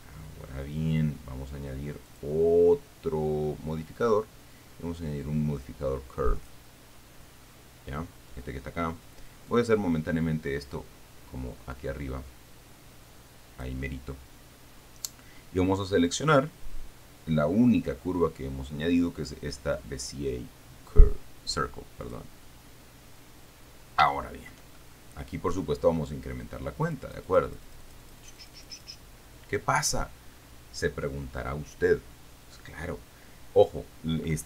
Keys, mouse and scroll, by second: 2.3 click, 6.7 click, 7.7-9.2 scroll down 1, 9.7 click, 11.2-14.1 drag, 16.3 click, 22.3 click, 23.3-23.9 scroll down 2, 24.4 shift+click, 24.7 shift+middle click, 25.1-25.9 shift+scroll up 1, 27.1-29.3 drag.